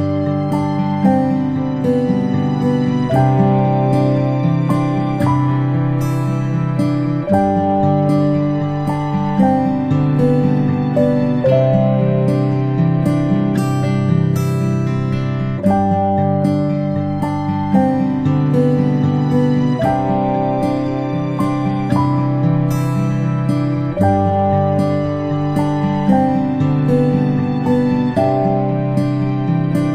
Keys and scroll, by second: 1.3 ctrl+[, 1.7 ctrl+[, 2.5 ctrl+], 2.9 ctrl+], 17.9 ctrl+z, 24.3 ctrl+[, 24.7 ctrl+], 24.9 ctrl+shift+[, 25.5 ctrl+], 25.9 ctrl+].